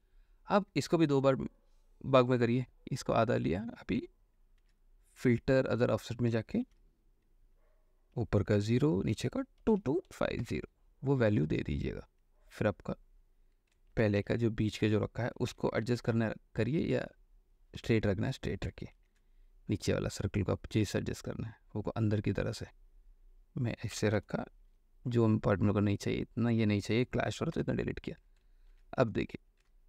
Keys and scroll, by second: 1.3 m, 4.7 ctrl+h, 6.8 ctrl+h, 8.8 0, 9.8 KP_2, 10.3 KP_5, 10.6 KP_0, 14.0 ctrl+d, 14.3 ctrl+v, 16.0 ctrl+t, 17.9 Escape, 19.1 ctrl+t, 24.5 Return, 24.8 l, 28.9 ctrl+d.